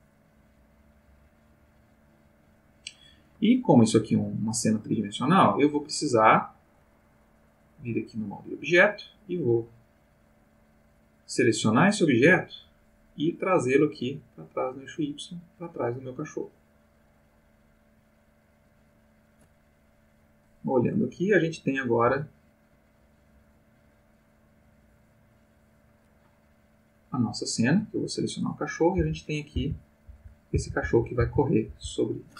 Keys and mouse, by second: 0.1-3.0 drag, 7.5 click, 8.2 click, 9.6 middle click, 10.1-11.6 middle drag, 14.4-15.6 drag, 15.8-17.8 middle drag, 18.6 click, 21.7 click, 22.1 g, 23.0 click, 23.5-26.0 drag, 27.0 click, 28.9 Left, 29.5 Right, 30.0 Left, 30.5 Right, 30.8 Left, 31.1 Right, 31.6 Left.